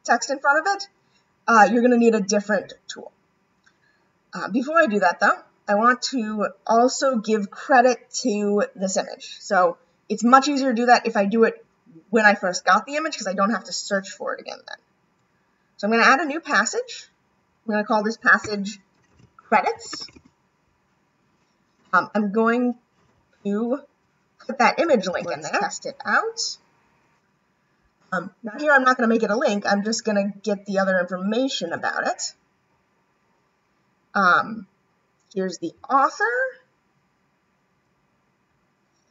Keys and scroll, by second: 24.9 ].